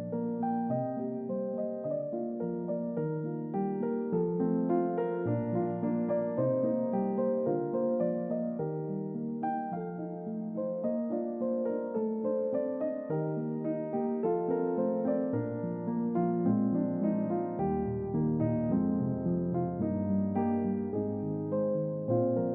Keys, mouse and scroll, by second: 1.1-2.3 scroll up 5, 2.7-3.0 scroll up 2, 11.9 click, 13.2 click, 13.9-14.7 scroll down 3, 15.0 click, 20.9-22.2 scroll up 4.